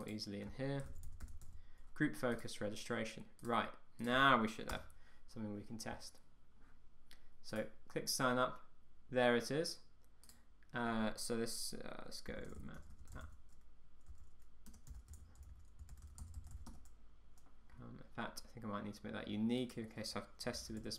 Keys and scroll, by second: 4.8 Return, 16.8 Tab.